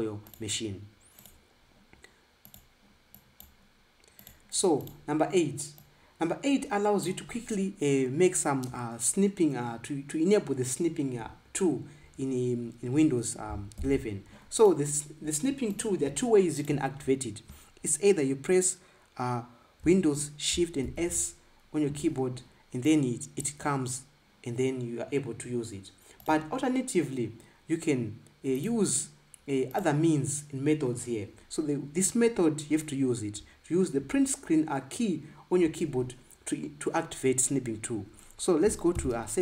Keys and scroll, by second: 14.6 ctrl+b, 21.6 shift+super+s.